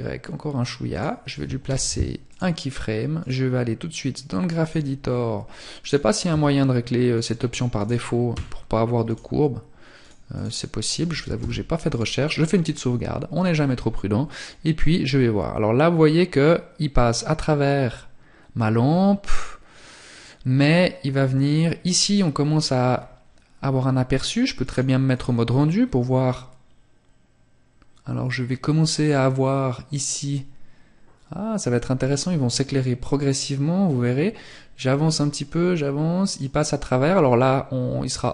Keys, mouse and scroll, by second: 0.5 i, 2.7 click, 9.3 click, 10.3 ctrl+s, 13.3 click, 21.9 scroll up 1, 23.5 click, 33.2 click.